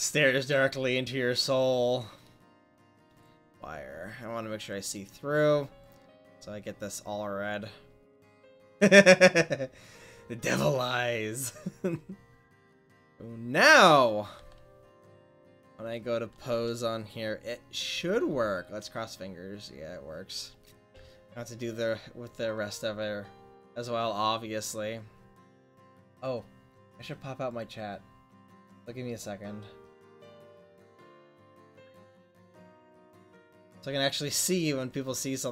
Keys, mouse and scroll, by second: 3.1-5.9 drag, 11.2-13.1 drag, 13.1-14.4 right drag, 14.4-14.9 drag, 15.9-17.9 drag, 17.9 r.